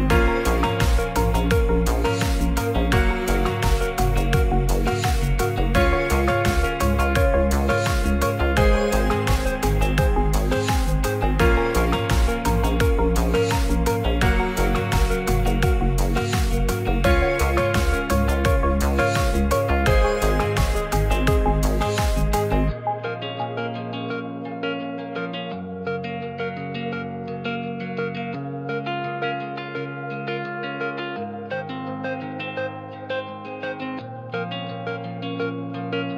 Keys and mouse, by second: 3.4 z, 4.8 click, 6.0 drag, 7.8 click, 27.1-28.5 drag, 29.4 click, 34.2 right click.